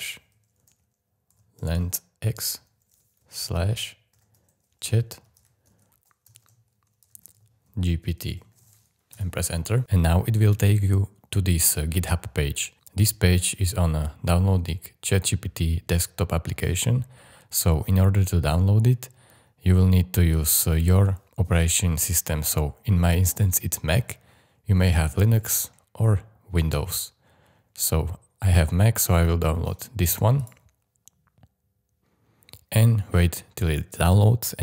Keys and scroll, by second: 1.1-2.7 typing, 4.1 shift+ú, 5.4-8.9 typing, 9.1 Return.